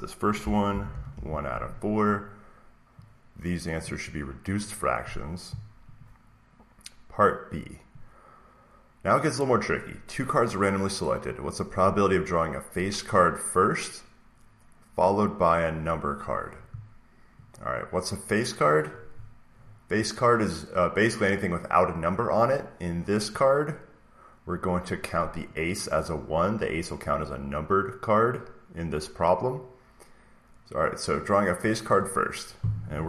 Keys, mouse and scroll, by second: 0.6 1, 2.1 click, 3.7 click, 5.9 click, 9.8 click, 11.8 click, 18.5-20.6 drag, 25.3-27.5 drag, 31.8-33.0 drag.